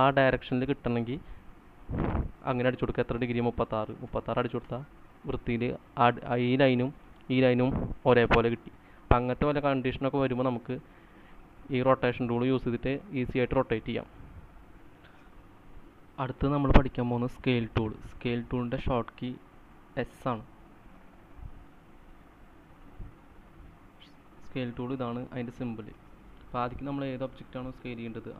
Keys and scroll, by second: 3.8-4.7 typing, 4.8 Return, 6.1-7.8 typing, 14.9 c.